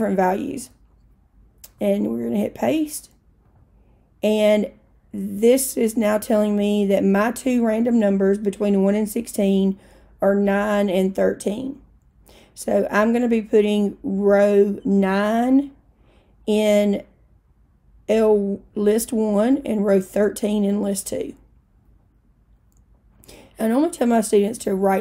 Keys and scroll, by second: 0.6 Return, 1.8 Return, 3.5 Return.